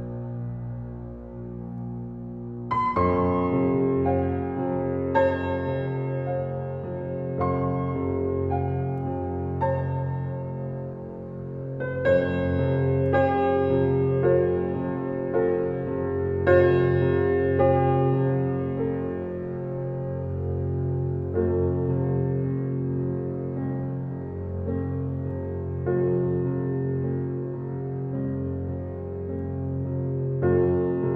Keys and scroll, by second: 1.5 Left, 3.8 Left, 5.1 Left, 7.8 Left, 9.7 Right, 19.7 Left, 22.4 Left, 23.9 Left, 26.0 Left, 27.9 Left, 30.1 Left.